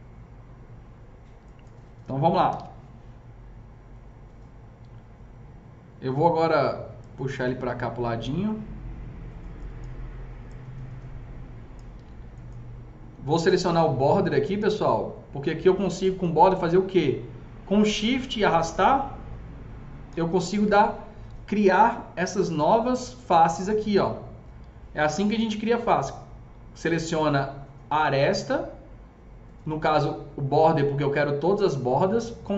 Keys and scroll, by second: 2.2-2.9 typing, 16.2 s, 22.0 F3, 22.7 F3, 22.8 F4, 25.4 ctrl+z.